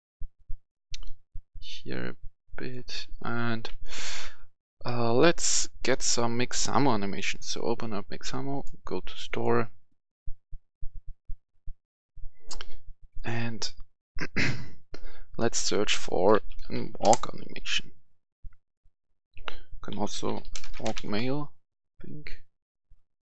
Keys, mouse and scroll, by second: 3.0 right click, 3.2 s, 5.7-14.1 drag, 16.3-16.9 typing, 17.0 Return, 18.9 click, 19.8-20.8 typing, 21.0 Return.